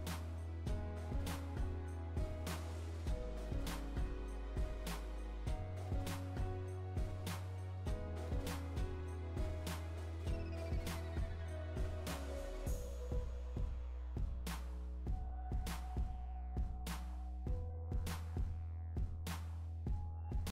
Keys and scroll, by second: 14.1 Return.